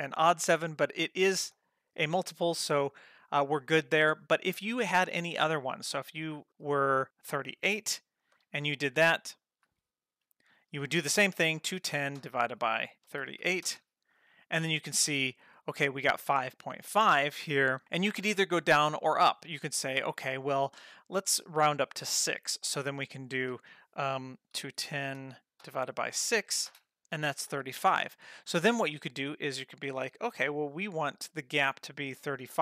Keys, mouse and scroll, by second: 5.1 click, 5.4 g, 6.5-7.0 drag, 7.9 Page_Down, 28.8 click, 30.1 Left, 31.6 Right.